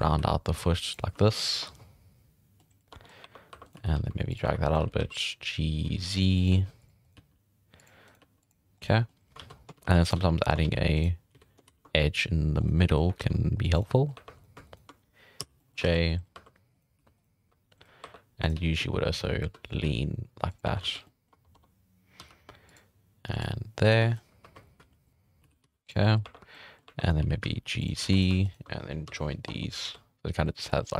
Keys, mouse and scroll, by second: 0.2 g, 1.2 shift+middle click, 1.6 Tab, 1.7-2.7 middle drag, 2.9 Tab, 3.0 scroll up 5, 3.2-4.8 typing, 3.6 right click, 4.7 right click, 6.5 g, 7.0 right click, 7.1 g, 8.1 right click, 8.2 g, 8.8 scroll down 1, 8.9-9.2 middle drag, 9.4 alt+a, 9.5 scroll up 1, 9.8 ctrl+r, 10.1 z, 10.6 ctrl+r, 11.3 z, 11.7 ctrl+r, 12.8-13.2 middle drag, 13.2 ctrl+r, 13.9 middle click, 14.1 1, 14.4 right click, 14.7 shift+right click, 15.4 j, 15.6 middle drag, 15.8 alt+a, 16.3 2, 16.7 right click, 17.0 g, 18.0 1, 18.4 right click, 18.5 g, 20.7 1, 20.9 alt+a, 21.0 scroll down 2, 21.0 middle drag, 21.3 Tab, 21.5 Tab, 22.2 k, 24.1 scroll up 4, 24.4-27.2 typing, 24.6 right click, 24.8 alt+a, 24.9 middle click, 25.3 middle click, 26.0 middle click, 26.5-26.9 middle drag, 27.0 right click, 28.0 alt+a, 28.1 right click, 28.5 shift+right click, 28.6 scroll up 1, 29.1 j, 29.2 middle drag, 29.5 Tab, 29.8 alt+a, 29.9-30.9 middle drag.